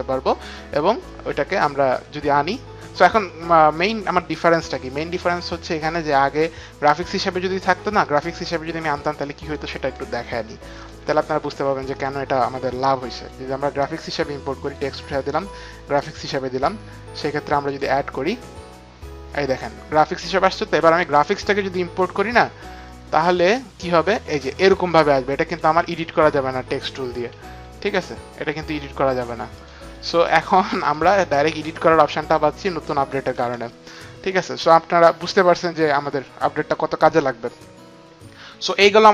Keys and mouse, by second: 1.0 click, 3.2 click, 9.4 click, 10.1 click, 10.8 click, 11.0 Delete, 12.2 Delete, 12.2 click, 13.1 click, 14.6 click, 15.5 click, 17.6 click, 20.8 click, 22.8 click, 25.4 click, 27.3 t, 27.8 click, 27.8 t, 29.6 click, 29.6 t, 30.1 click, 30.1 t, 30.8 click, 33.3 Delete.